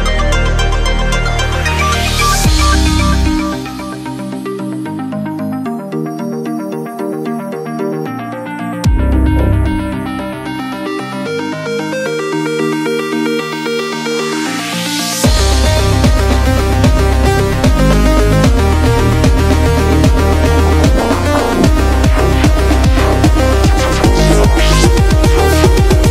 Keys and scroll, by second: 0.6 super+u, 9.9 super+=, 10.0 super+=, 11.8 super+=, 15.6 typing, 16.7-17.2 typing.